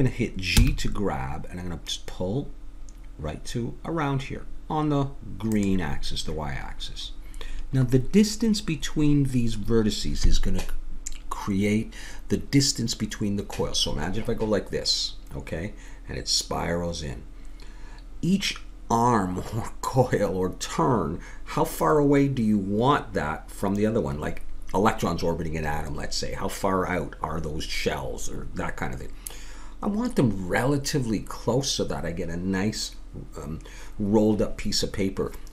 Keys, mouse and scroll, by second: 0.6 g, 7.0-10.0 middle drag.